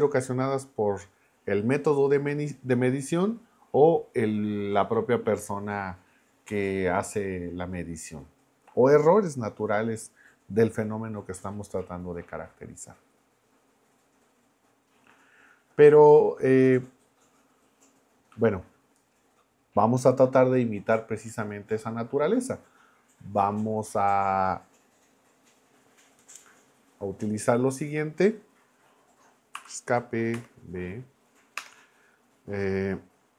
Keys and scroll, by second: 29.6 Escape, 30.3 b, 31.6 Return.